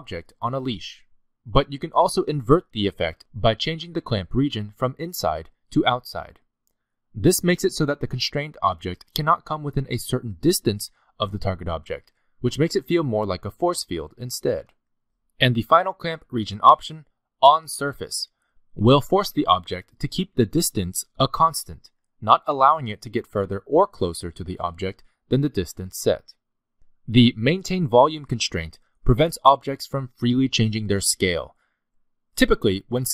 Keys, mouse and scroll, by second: 0.0 g, 3.3 middle click, 3.9-5.2 scroll up 3, 5.2 click, 7.1 scroll down 1, 7.2 middle click, 7.8 g, 14.9 middle click, 16.9 click, 18.4 g, 19.7 g, 21.7 middle click, 22.0 g, 25.9 middle click, 26.1 g, 30.4 s.